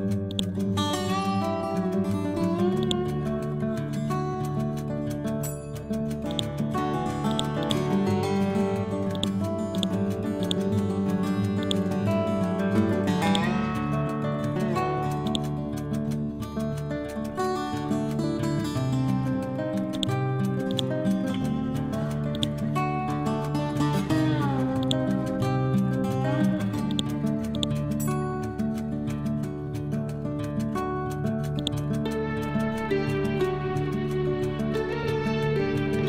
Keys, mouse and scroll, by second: 2.9-4.8 drag, 4.8 scroll down 1, 6.3 shift+click, 8.1 scroll up 1, 9.2 ctrl+click, 11.6-18.4 shift+drag, 20.0 click, 20.7 click, 22.9-23.3 scroll down 1, 24.9-26.9 drag, 27.6 ctrl+click, 28.2 scroll up 1, 29.9 scroll down 1, 30.2-33.7 drag, 33.7 scroll up 1, 34.8 Left.